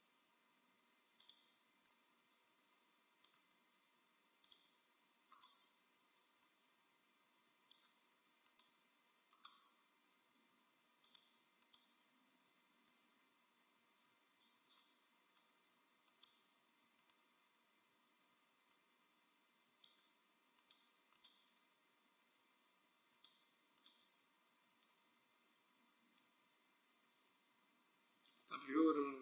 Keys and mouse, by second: 0.3 x, 4.4-6.0 drag, 5.3-6.4 right drag, 6.4 middle click, 8.4-10.8 right drag, 10.2 f, 11.0-12.7 right drag, 12.3 f, 12.7 middle click, 13.1 right click, 15.9-18.6 right drag, 17.8 f, 18.6 middle click, 20.5-24.6 right drag, 21.9 f, 24.6 f, 26.4 a, 26.6 a, 27.5 w.